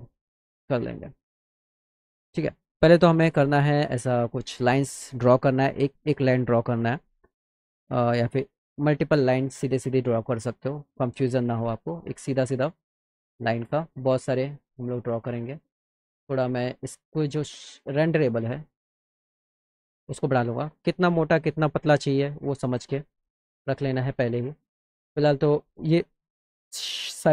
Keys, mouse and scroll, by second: 1.6 middle click, 3.5 click, 9.4 middle click, 9.8 middle click, 11.5 click, 13.5 shift+click, 15.6 click, 16.8 click, 18.2 click, 18.9 click, 19.3 click, 20.3 middle click, 27.0-27.3 drag.